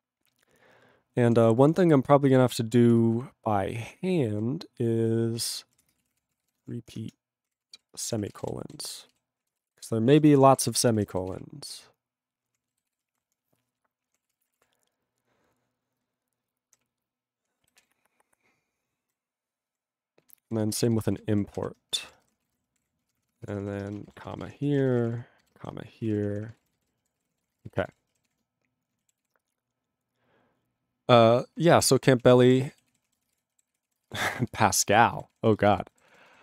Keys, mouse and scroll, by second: 0.3 ctrl+p, 0.8 ctrl+p, 3.0 ctrl+n, 3.5 ctrl+n, 5.4 ctrl+e, 5.5-7.4 typing, 7.9 ctrl+e, 8.0 ctrl+space, 8.1 ctrl+p, 8.3 ctrl+g, 8.4 ctrl+e, 8.5 ctrl+n, 8.6 ctrl+a, 8.7 ctrl+n, 8.9 ctrl+e, 9.1 ctrl+b, 9.4 ctrl+a, 9.5 ctrl+space, 9.6 ctrl+e, 9.7 ctrl+g, 10.0 ctrl+space, 10.1 ctrl+a, 10.2 ctrl+p, 10.6 ctrl+g, 10.6 ctrl+e, 10.7 ctrl+n, 11.3 ctrl+s, 11.5 ctrl+p, 12.9 ctrl+s, 13.0 ctrl+p, 14.1 ctrl+e, 14.4 ctrl+p, 14.4 ctrl+e, 14.5 ctrl+p, 14.6 ctrl+e, 16.0 ctrl+n, 16.8 ctrl+p, 17.8 ctrl+s, 17.9 ctrl+n, 20.2 ctrl+a, 20.4 ctrl+space, 20.5 ctrl+n, 20.9 alt+w, 21.0 ctrl+n, 21.1 ctrl+e, 21.2 ctrl+n, 21.6 ctrl+p, 22.2 ctrl+e, 22.2 ,, 22.6 ctrl+a, 22.8 ctrl+o, 22.8 ctrl+y, 23.0 ctrl+p, 23.1 ctrl+e, 23.2 ctrl+p, 23.9 ,, 24.2 ctrl+a, 24.3 ctrl+n, 24.3 ctrl+e, 24.4 ctrl+n, 24.5 ctrl+e, 24.6 ctrl+n, 24.8 ctrl+a, 25.0 ctrl+k, 25.0 ctrl+p, 25.1 ctrl+e, 25.5 ctrl+n, 25.6 ,, 26.1 ctrl+space, 26.1 ctrl+p, 26.5 ctrl+g, 26.6 ctrl+e, 26.6 ctrl+n, 26.8 ctrl+e, 27.2 ctrl+s, 27.3 ctrl+p, 27.3 ctrl+a, 27.4 ctrl+p, 27.5 ctrl+e, 27.6 ctrl+n, 27.7 ctrl+e, 27.7 ctrl+n, 27.9 ctrl+e, 27.9 ctrl+g, 28.3 ctrl+s, 32.2 ctrl+a, 32.4 ctrl+space, 32.5 ctrl+g, 32.9 ctrl+s, 33.1 ctrl+a, 33.2 ctrl+space, 33.3 ctrl+e, 33.3 ctrl+g, 33.7 ctrl+s, 33.9 ctrl+a, 34.0 ctrl+space, 34.1 ctrl+e, 34.1 ctrl+g, 34.5 ctrl+s, 34.7 ctrl+a, 34.8 ctrl+space, 34.9 ctrl+e, 34.9 ctrl+g, 35.3 ctrl+s, 35.5 ctrl+a, 35.6 ctrl+space, 36.1 ctrl+s, 36.3 ctrl+g.